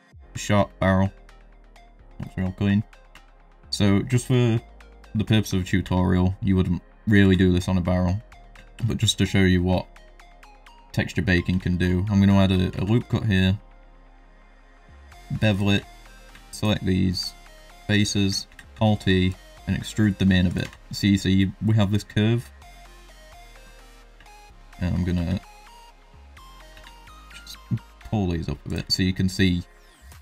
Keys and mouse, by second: 0.2 middle drag, 0.7 middle drag, 1.3 shift+middle drag, 1.8 middle click, 2.2 shift+middle drag, 3.2 shift+middle drag, 3.5 middle drag, 5.8 Tab, 7.2 ctrl+r, 8.6 shift+middle click, 9.2 middle click, 9.9 shift+middle click, 12.7 ctrl+b, 15.7 3, 17.4 middle click, 17.9 middle click, 18.4 alt+e, 20.6 Tab, 20.8 middle click, 21.3 middle drag, 22.4 middle click, 23.7 middle drag, 24.1 Tab, 24.3 middle click, 24.6 click, 25.2 ctrl+r, 26.7 s, 28.7 Tab, 29.1 middle drag, 30.0 middle drag.